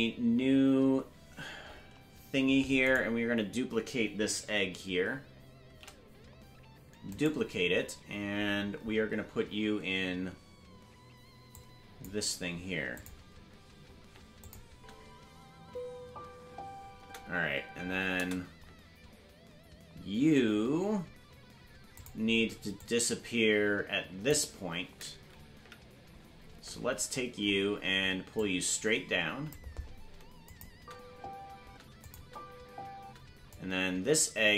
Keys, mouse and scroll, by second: 5.9 shift+d, 11.5 click, 13.2 click, 14.4 click, 14.7 space, 19.2 space, 21.9 click, 22.8-24.3 drag, 25.6 Right, 26.8-27.4 scroll down 5, 27.4-28.3 scroll up 2, 28.3-29.5 drag, 30.4 click, 30.7 space, 32.0 click, 32.0 space, 32.2 space, 33.5-34.5 drag, 33.5 space.